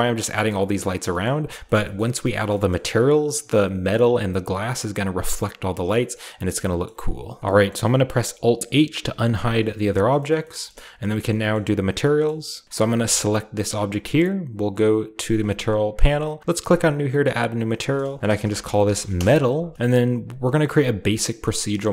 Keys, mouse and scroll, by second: 0.0-0.2 typing, 1.3 shift+middle click, 1.3-4.6 shift+scroll up 1, 4.6-5.6 scroll down 1, 5.6-7.4 scroll down 1, 5.7 middle click, 6.6 middle click, 6.7 middle click, 6.9-7.3 typing, 7.5-9.1 middle drag, 7.5-9.1 scroll up 1, 9.1 alt+h, 9.7 a, 10.1-11.7 shift+middle drag, 10.8-11.7 scroll up 1, 11.7-12.6 scroll down 1, 12.6-13.0 scroll up 1, 13.0 middle click, 13.8 scroll up 1, 15.4 click, 16.7 click, 17.8 click, 18.3-19.9 typing, 19.1 Return, 19.7-21.9 shift+middle drag, 20.7-21.9 shift+scroll up 1.